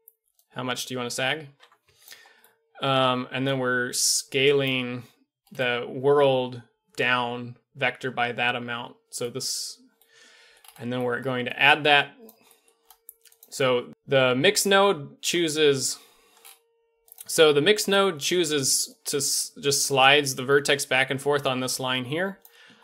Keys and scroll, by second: 15.2 d, 18.4 d, 22.4 d, 22.7 d.